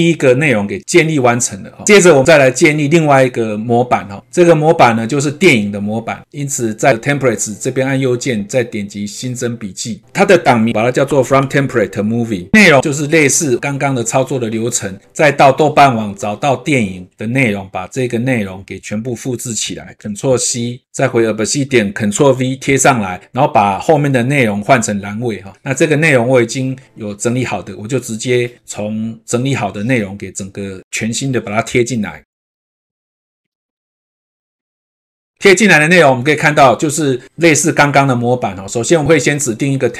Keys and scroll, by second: 19.7 ctrl+c, 22.1 ctrl+v, 30.8 ctrl+a, 34.2 ctrl+a, 34.4 ctrl+c, 35.1 ctrl+v.